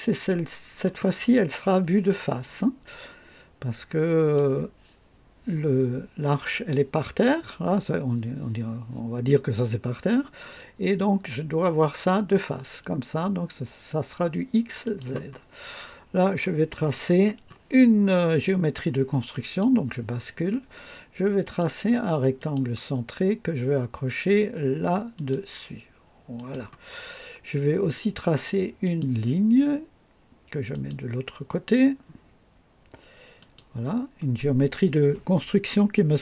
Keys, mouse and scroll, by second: 1.0-1.7 scroll down 3, 2.1-4.6 drag, 11.8 click, 14.8 click, 15.7-16.1 scroll up 2, 16.4-17.1 right drag, 19.3 click, 21.4 click, 22.4 click, 25.1 click, 26.3 click, 28.8 click, 30.7 click, 33.4 click, 34.2 right click.